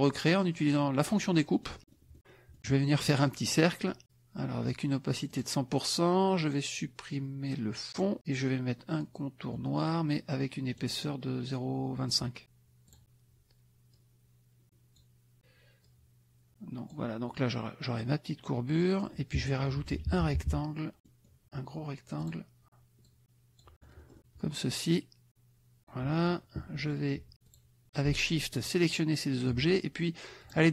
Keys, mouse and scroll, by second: 1.0 click, 1.5 middle click, 2.2 middle click, 3.2 click, 4.6 right click, 5.3 click, 7.9 click, 9.5-10.7 middle drag, 10.7 right click, 12.2 click, 12.9 click, 13.9-15.1 drag, 15.4 click, 15.8-17.1 drag, 19.6 KP_Subtract, 21.0 click, 22.2 click, 23.0 click, 23.8 middle click, 25.3 click, 26.1 middle click, 27.5 shift+click, 28.6 shift+click, 30.5 click.